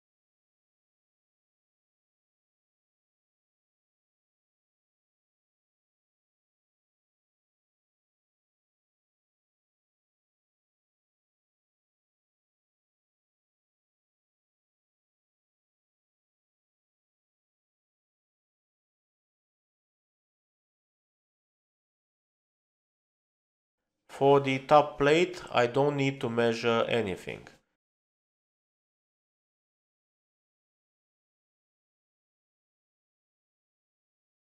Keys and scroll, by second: 3.7 typing.